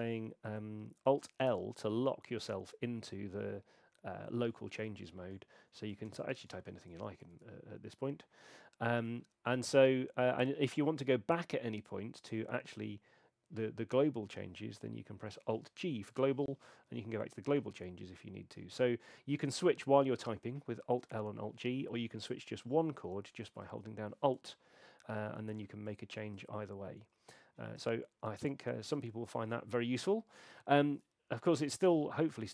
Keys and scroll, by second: 1.5 alt+l, 6.1-7.4 typing, 9.6 Right, 16.1 alt+g, 17.0 Return, 23.2 Return, 27.8 Escape.